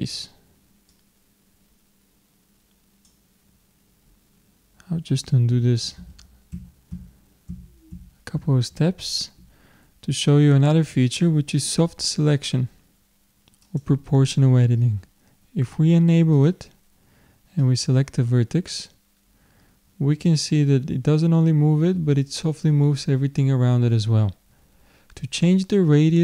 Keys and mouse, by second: 5.5 ctrl+z, 6.1 ctrl+z, 6.5 ctrl+z, 6.9 ctrl+z, 7.5 ctrl+z, 7.9 ctrl+z, 8.4 ctrl+z, 13.7-15.7 drag, 17.6-20.6 drag.